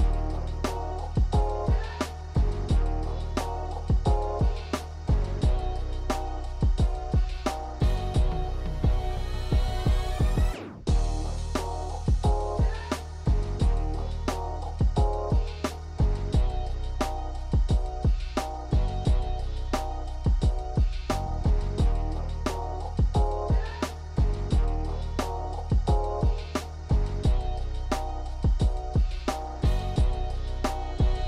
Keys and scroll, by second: 5.2 ctrl+z, 19.2 l, 27.7 f.